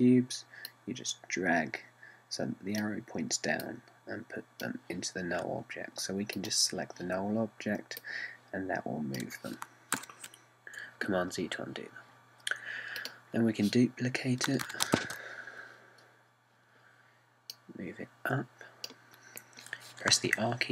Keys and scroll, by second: 11.0 super+z, 15.7 super+c, 16.1 super+v.